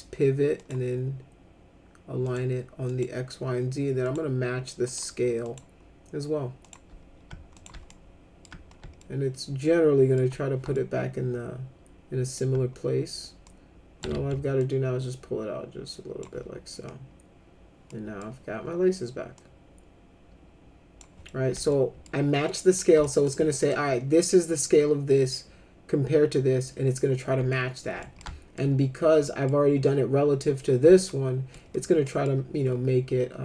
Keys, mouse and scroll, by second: 0.6 click, 2.2 click, 2.9 click, 4.0 click, 4.9 click, 5.4 click, 6.6 click, 7.5 click, 7.9 alt+middle click, 9.0-10.1 alt+middle drag, 10.7-12.3 alt+middle drag, 13.4 click, 14.1 ctrl+z, 14.6-16.2 drag, 17.9 middle click, 19.3-21.0 drag, 21.2 middle click, 21.7 alt+middle click, 22.5 middle click, 23.0 alt+middle click, 23.6 click, 27.5 alt+middle click, 28.2 alt+middle click, 29.2 middle click, 31.1 alt+middle click, 31.7 middle click, 32.0 middle click.